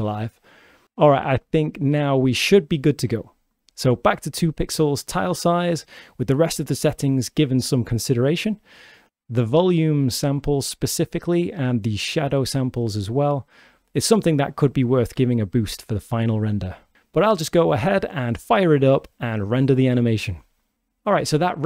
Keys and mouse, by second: 3.0-4.7 drag, 10.7-13.3 drag, 14.6-17.1 drag, 18.6-20.9 drag, 20.9 click, 21.6 click.